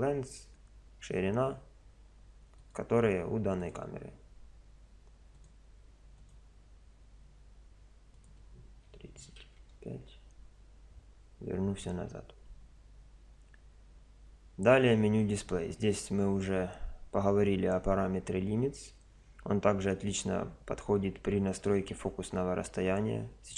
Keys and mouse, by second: 2.6 click, 5.3 click, 8.1 click.